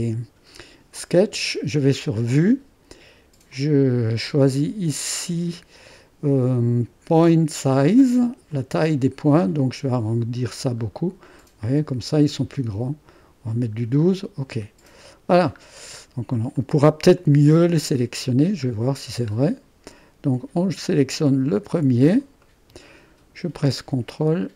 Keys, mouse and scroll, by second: 2.1 click, 3.5-7.3 drag, 8.5 click, 9.4-11.2 scroll up 1, 11.2-12.0 scroll up 1, 12.0-13.2 scroll down 2, 15.0 click, 15.7-16.6 scroll down 2, 16.6-18.0 drag, 18.7-22.0 scroll up 1, 22.2-23.3 drag.